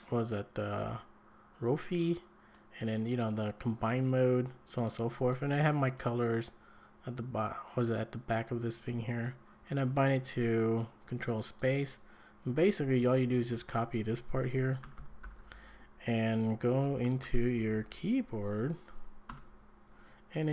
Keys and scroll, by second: 12.9 Escape, 13.5 shift+v, 14.6-16.3 typing, 17.2 ctrl+space, 17.3-18.3 typing, 19.3 Return.